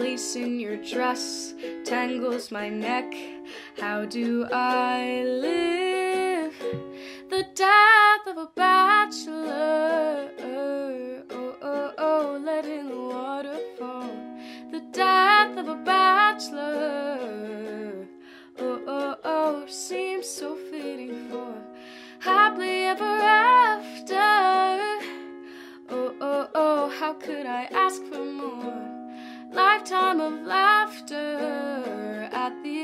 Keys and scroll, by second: 0.0-0.8 typing, 3.3 ctrl+d, 3.5-7.1 typing, 8.2 ctrl+a, 9.5-10.5 typing, 11.8-12.7 typing, 15.0 ctrl+d, 15.2 ctrl+d.